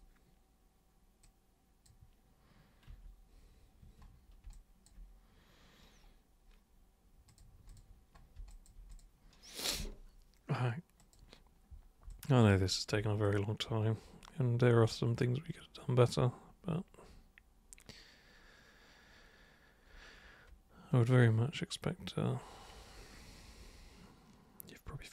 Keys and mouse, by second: 1.2 click, 2.9 3, 3.8 1, 4.5 alt+super+click, 7.2 super+click, 7.7 super+click, 8.5 alt+super+click, 8.9 super+click, 11.0 super+click, 12.1 alt+super+click, 13.2-25.1 super+drag.